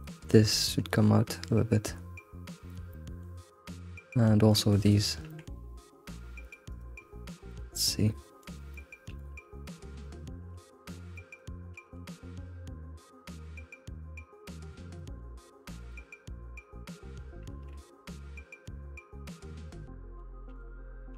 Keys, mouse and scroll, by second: 0.6 g, 2.9 middle click, 3.6-4.1 middle drag, 4.1-4.5 scroll up 1, 4.5 click, 4.8 ctrl+click, 5.2 g, 6.7 right drag, 7.5 click, 7.8 middle click, 8.7 click, 9.2 shift+click, 10.8 shift+click, 11.1 middle click, 12.0 alt+s, 15.0-15.5 middle drag, 15.5 click, 15.9 ctrl+click, 16.5 click, 17.2 ctrl+click, 17.5 alt+s, 19.6-20.5 middle drag, 20.5 click.